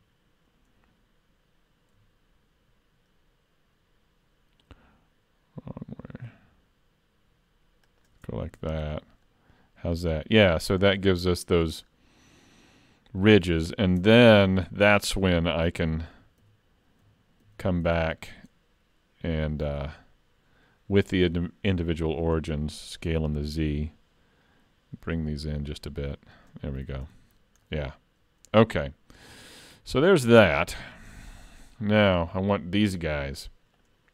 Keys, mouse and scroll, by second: 8.6 alt+a, 8.8 Tab, 9.3 middle click, 11.8-12.2 scroll down 3, 12.2 scroll up 4, 12.5 middle click, 13.7-14.1 scroll down 2, 14.0 Tab, 15.5 shift+middle click, 16.4 ctrl+z, 17.4 ctrl+z, 17.9 ctrl+z, 18.4 middle click, 21.1 click, 23.1 s, 26.9 alt+a, 27.0 Tab, 27.4-27.9 scroll up 2, 27.7 middle click, 28.8-29.4 scroll down 1, 29.4 scroll down 4, 29.5 shift+middle click, 30.3-30.7 scroll down 2, 30.8 shift+middle click, 31.1 middle click, 32.3 shift+middle click, 33.8 click.